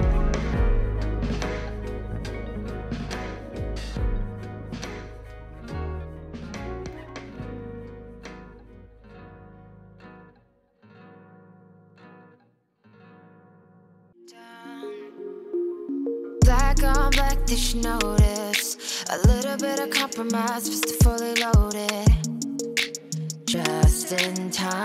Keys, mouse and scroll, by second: 0.1-1.5 scroll down 1, 1.5-2.5 drag, 2.5-4.1 scroll up 1, 4.1-6.7 drag, 8.6-11.4 drag, 11.4-11.7 middle drag, 12.1-12.7 drag, 12.7-13.3 middle drag, 13.5 click, 13.9 middle click, 14.3 click, 14.7-15.2 drag, 15.2-15.5 middle drag, 15.8 click, 16.7 click, 17.5 click, 18.1-19.5 middle drag, 19.6 click, 21.0-22.1 drag, 22.9 click, 23.9-24.8 drag.